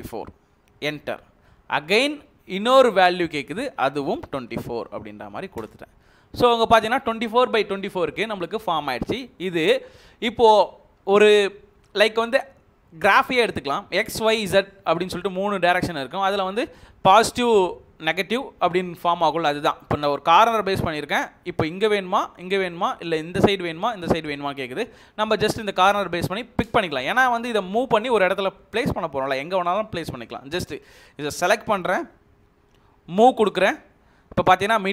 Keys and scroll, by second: 0.7 Return, 4.3 typing, 5.5 Return, 33.1-33.5 typing.